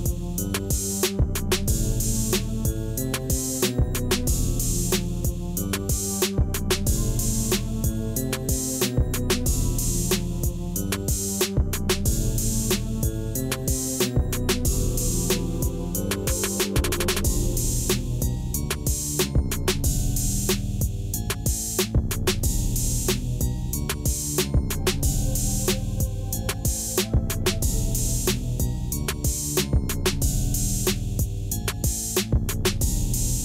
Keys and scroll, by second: 1.7 s, 4.1 s, 5.5 g, 9.8 shift+z, 18.2 g, 19.4 shift+z, 20.5 alt+a, 29.6 Tab, 30.6 ctrl+r, 32.9 s.